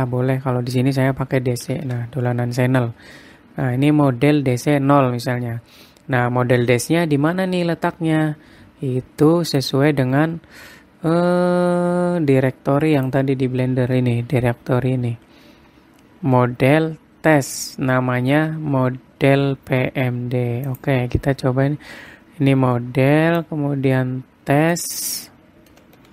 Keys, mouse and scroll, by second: 15.2-16.5 scroll up 15.